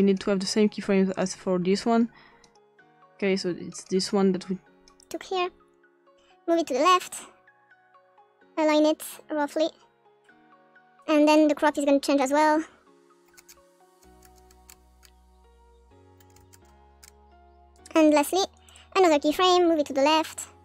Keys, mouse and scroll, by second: 0.0 click, 1.2 click, 2.4 click, 3.7 click, 4.8 click, 6.4-10.2 drag, 11.0-11.4 drag, 12.2 click, 13.2 click, 13.3-14.4 scroll down 3, 14.4-15.4 scroll up 2, 15.4 click, 16.1 click, 16.3-16.6 scroll down 2, 16.5 scroll up 1, 16.6 scroll down 1, 17.0 scroll up 2, 18.1 click, 18.7 click, 19.5-20.6 drag.